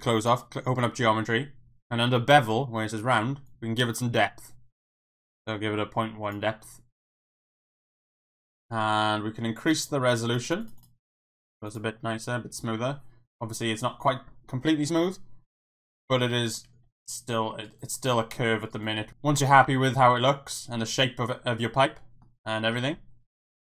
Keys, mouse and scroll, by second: 0.2 click, 3.6-6.3 drag, 7.0 click, 7.4 click, 10.1 click, 10.4 click, 10.6 click, 10.8 click, 11.7 click, 12.1-13.4 middle drag, 13.7-14.0 middle drag, 14.9 KP_1, 15.7 Tab, 16.8 g, 17.6 right click, 18.2 g, 18.7 right click, 19.0 e, 19.1 Tab, 19.6 Tab, 21.3-22.2 middle drag, 22.7 middle click, 23.5 KP_1.